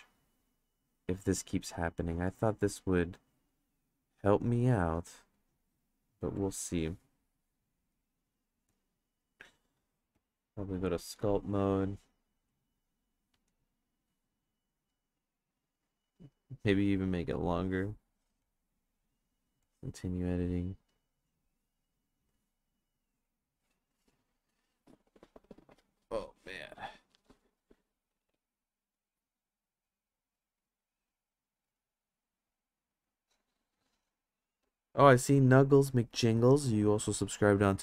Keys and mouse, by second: 0.7 click, 1.3 click, 2.0 click, 3.0 click, 4.1 click, 5.4 click, 6.4 click, 7.9 click, 8.5 click, 9.2 click, 10.2-11.3 drag, 12.5 click, 13.5 click, 14.4 click, 15.0-16.4 drag, 17.3 click, 18.4-19.6 drag, 21.2 click, 22.1 click, 22.8 click.